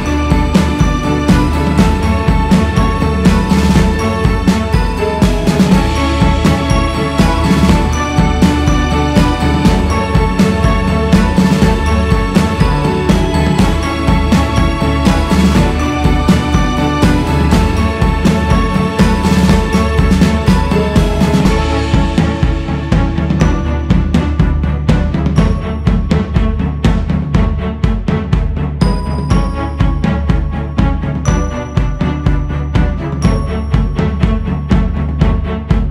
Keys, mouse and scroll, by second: 0.2 click, 1.3 click, 2.0 scroll up 5, 3.0 scroll up 3, 4.4 q, 6.8-11.7 drag, 12.9 shift+s, 13.3 f, 14.2-16.1 drag, 16.1 shift+c, 17.0-17.9 scroll up 1, 17.9-18.9 drag, 18.9 ctrl+z, 19.5 f, 21.0-24.2 drag, 24.2-24.6 scroll down 1, 26.2-30.6 drag, 30.9-34.6 drag, 35.7 click.